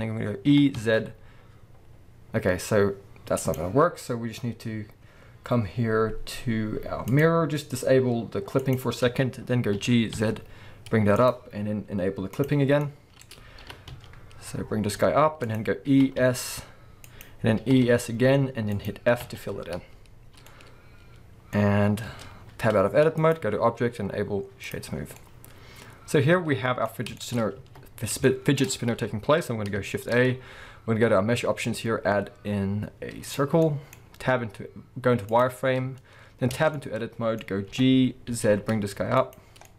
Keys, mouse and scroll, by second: 0.5 e, 3.5 right click, 7.1 click, 8.6 click, 9.7 g, 11.3 click, 12.4 click, 12.8-15.5 middle drag, 13.6 g, 15.5 click, 15.9 e, 17.2 click, 17.6 e, 18.9 click, 20.0 f, 20.0-20.5 scroll down 1, 20.5-23.2 middle drag, 22.1 Tab, 22.4-23.2 scroll down 1, 23.2-25.2 drag, 24.9 scroll down 1, 25.2-39.3 middle drag, 27.1-27.6 shift+scroll up 2, 27.6 alt+a, 29.9 shift+a, 34.2 z, 36.5 Tab, 37.7 g, 39.3 click, 39.6-39.7 middle drag.